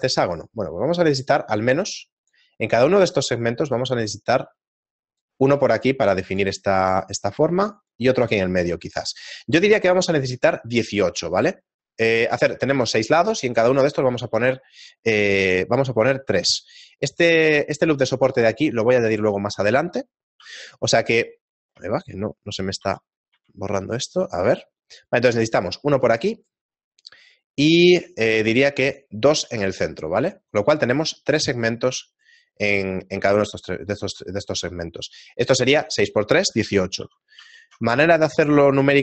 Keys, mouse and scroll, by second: 38.3 right click.